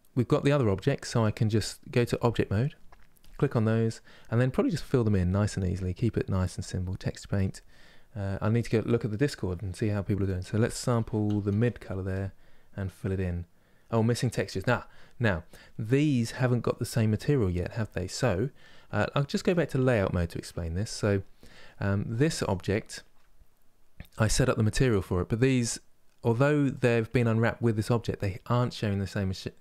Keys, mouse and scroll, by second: 2.2 click, 3.4-6.2 middle drag, 6.2-15.3 drag, 15.3-19.1 middle drag, 19.1-22.1 drag.